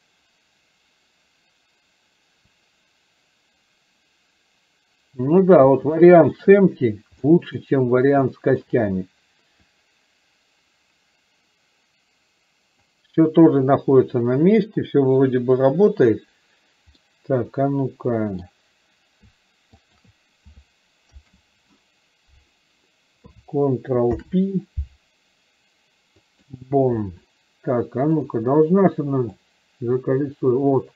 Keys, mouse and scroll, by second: 6.1-6.4 shift+middle drag, 7.3-7.7 shift+middle drag, 8.4 shift+middle drag, 9.7-12.9 drag, 13.6 click, 17.1-18.6 middle drag, 19.9 shift+click, 28.3 click, 29.6-30.9 drag.